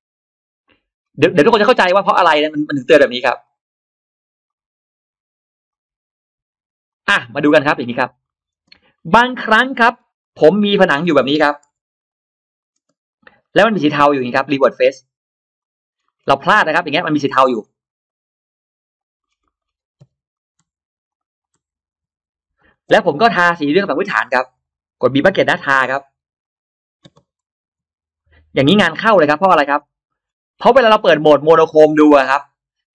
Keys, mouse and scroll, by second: 0.1-0.4 scroll up 2, 0.5 click, 0.9 middle drag, 1.5 click, 1.9 middle drag, 2.4 click, 3.3 click, 3.7 middle drag, 4.3 click, 5.5 click, 6.7 click, 7.0-7.3 scroll down 1, 7.3-7.8 middle drag, 7.9-8.5 scroll down 1, 8.1 middle click, 8.5 space, 8.6 click, 8.8-9.1 scroll up 1, 9.0 middle click, 9.1-9.4 scroll down 1, 9.5-9.9 scroll up 1, 10.1 click, 10.1 r, 10.7 click, 10.7 r, 10.9 middle click, 11.4 middle click, 11.7 p, 11.8 click, 12.4 click, 12.6 space, 13.0 click, 13.3 right click, 15.4 click, 15.7-16.1 scroll down 1, 15.9 middle click, 16.1-16.4 scroll up 1, 16.2 space, 16.5 click, 16.6 click, 16.8 click, 16.9 click, 17.2 click, 17.4 click, 17.6 click, 17.7 click, 17.9 right click, 18.8 click, 19.1-19.7 scroll down 2, 19.3 middle click, 19.9 m, 20.2 click, 20.9 click, 21.3 click, 22.4 click, 22.7 space, 22.8 click, 23.0 scroll up 1, 23.2 scroll down 1, 23.7 scroll up 1, 24.4 click, 24.5 click, 24.9 scroll up 1, 24.9 middle click, 25.6 b, 26.3 click, 26.9 scroll down 1, 26.9 space, 27.5 Escape, 27.9 Escape, 27.9 click, 28.0 click, 28.6 scroll up 1, 29.0 b, 29.0 click, 29.5 space, 29.5-29.8 scroll down 1, 30.1 Escape, 30.1-31.1 scroll down 2, 30.1 space, 30.7 middle click, 32.2 click.